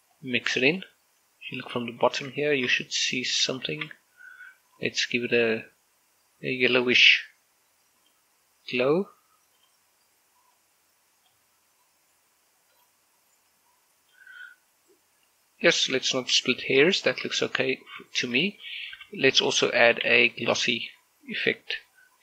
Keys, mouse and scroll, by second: 2.0 middle click, 4.0 scroll up 1, 4.6 shift+middle click, 5.6-10.4 drag, 10.4-13.5 drag, 13.5 click, 15.2 scroll down 1, 15.5-16.8 middle drag, 17.2-17.6 scroll up 1, 17.8 shift+middle click, 19.6 click, 19.8 g, 20.1 click, 20.4 shift+middle click, 20.8 shift+a.